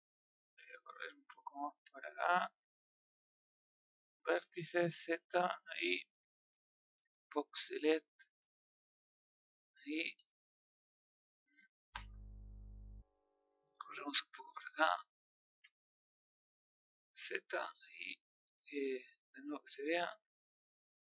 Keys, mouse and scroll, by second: 4.2 click, 5.3 z, 6.5 click, 9.1 click, 11.7 click, 19.2-20.4 middle drag, 20.4-20.7 scroll down 1, 20.7-21.1 middle drag.